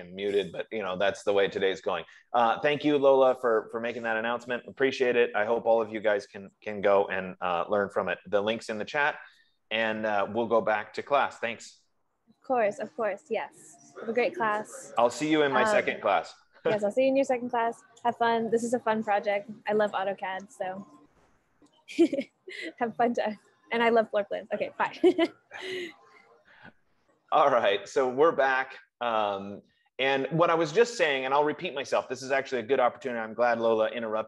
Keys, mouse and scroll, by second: 25.2 F15.